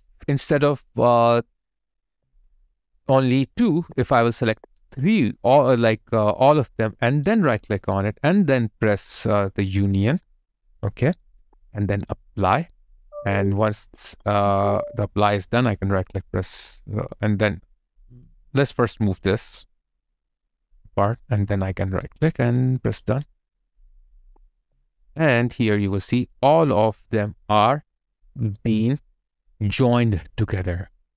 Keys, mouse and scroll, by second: 2.1 alt+middle click, 2.8 alt+right click, 3.7 shift+click, 7.1 right click, 13.7 alt+right click, 17.6 middle click, 22.0 right click, 24.1 double click, 24.6 alt+click, 25.1 alt+middle click, 25.7 alt+right click, 26.3 alt+click, 28.3 alt+right click, 28.8 alt+click, 29.4 alt+middle click, 29.8 alt+click, 30.6 alt+right click, 30.9 alt+click.